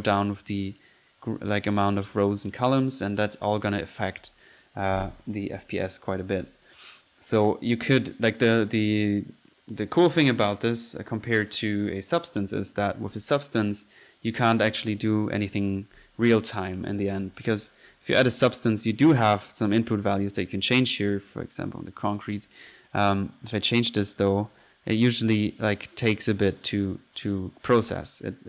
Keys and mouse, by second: 0.5 click, 2.7 click, 3.4 click, 13.4-13.8 drag, 16.5 click, 16.7-18.1 typing, 18.2 click, 19.3 click, 19.4-20.0 drag, 20.4 drag, 20.8 drag, 21.1 click, 21.2-21.6 drag, 21.7-22.0 drag, 22.1-23.0 drag, 23.0-23.5 drag, 23.7-24.3 drag, 24.8 middle drag, 25.1-26.4 drag, 26.5 click, 27.2 click, 27.9 click.